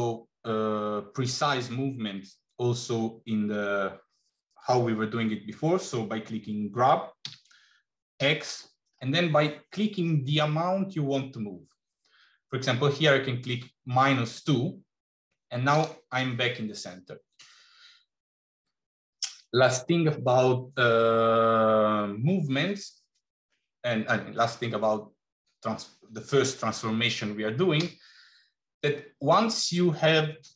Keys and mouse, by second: 7.1 g, 27.8 g.